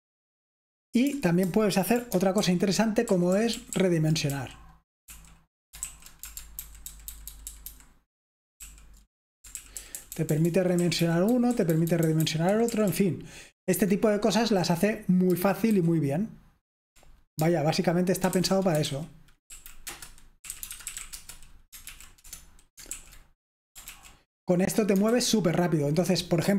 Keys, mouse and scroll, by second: 0.0-7.1 typing, 2.5 alt+super+l, 3.1 alt+super+l, 3.4 alt+super+l, 3.8 alt+super+l, 4.3 alt+super+l, 5.2 alt+l, 7.0-9.9 alt+super+h, 9.9 alt+super+l, 11.8 alt+super+h, 15.8 super+w, 18.1-26.5 typing.